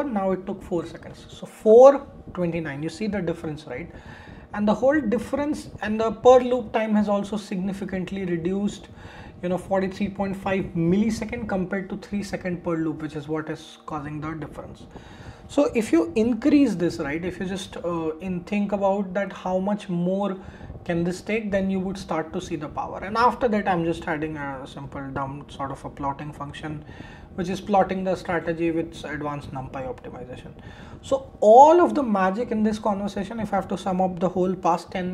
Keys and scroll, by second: 24.4 shift+Return.